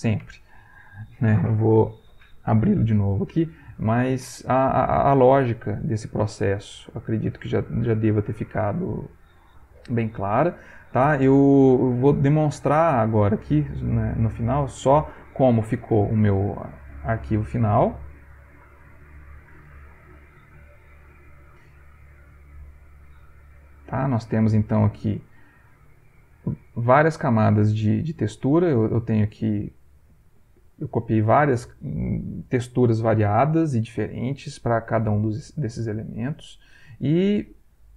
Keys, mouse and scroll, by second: 18.9 click, 23.4 click, 24.1 ctrl+click, 25.0 ctrl+middle click, 26.4 click, 28.1 click, 29.5 click, 30.1 click, 30.8 click, 34.1 click, 35.6 click, 35.7 middle click, 36.1 ctrl+middle click.